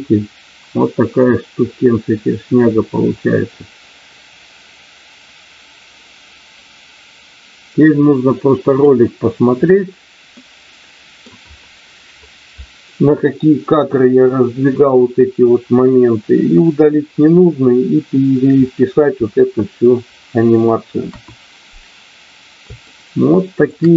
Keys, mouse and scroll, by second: 10.3 middle click, 21.1 KP_1, 22.8 shift+middle click.